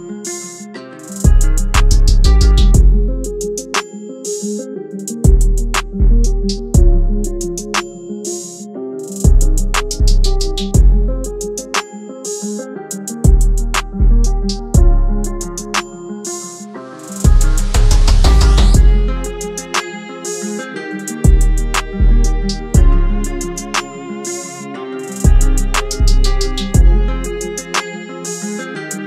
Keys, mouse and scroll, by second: 19.2 double click, 23.2-25.1 [, 25.7 double click.